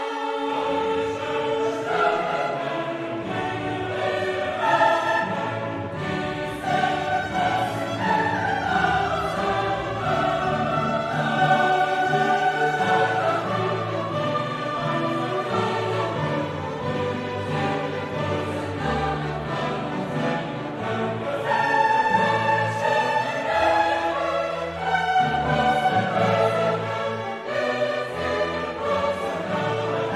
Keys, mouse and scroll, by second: 0.0 right click, 1.0 click, 1.8 click, 3.0 click, 5.8 click, 8.1-9.7 drag, 9.9 middle click, 11.0 click, 12.8 click, 14.6 click, 15.7 click, 16.7 right click, 17.8 click, 18.6 click, 19.6 click, 22.3 click, 24.7-26.8 drag, 27.1 middle click, 28.1 click, 29.3 click.